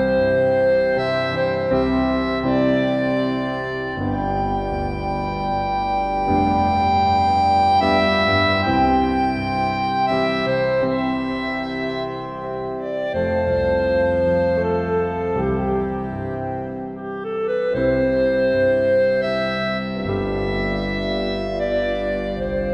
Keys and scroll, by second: 14.3 ctrl+t.